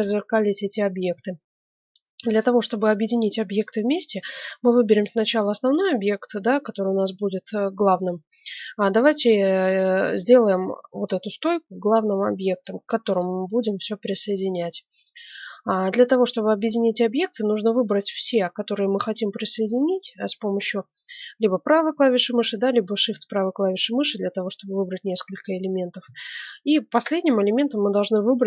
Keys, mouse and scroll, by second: 4.9-6.8 middle drag, 9.1-10.8 right drag, 10.8 middle click, 12.6-16.4 middle drag, 18.2-19.9 right drag, 22.8-24.8 right drag.